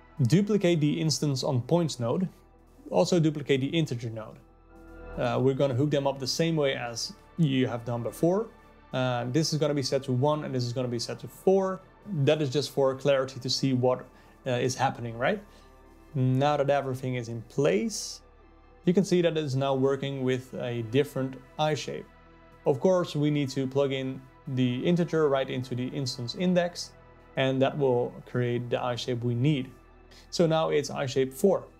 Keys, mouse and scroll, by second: 0.0 click, 0.8 click, 1.2 shift+d, 4.8 click, 5.0 shift+d, 6.3 click, 9.4-15.9 drag, 16.1-17.4 drag, 19.7-20.9 drag, 24.1-25.2 drag.